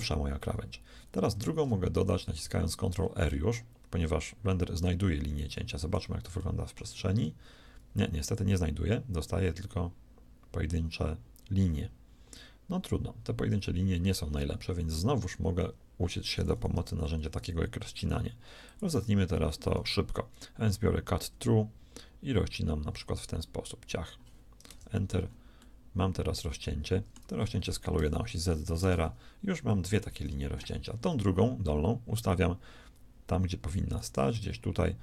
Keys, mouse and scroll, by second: 1.2 ctrl+r, 5.4-6.9 middle drag, 7.9 ctrl+r, 16.7 k, 28.1 s, 30.0 KP_1, 33.8 shift+s.